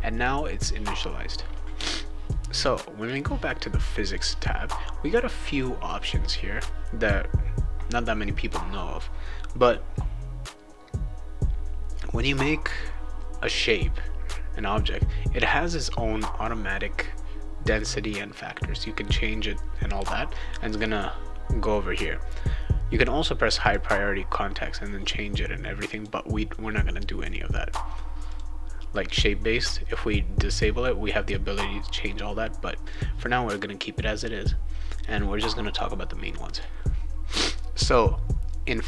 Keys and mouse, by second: 1.8 Return, 3.0 click, 4.1 click, 13.5 click, 23.6 click, 25.9 click, 28.2 click, 32.9 click.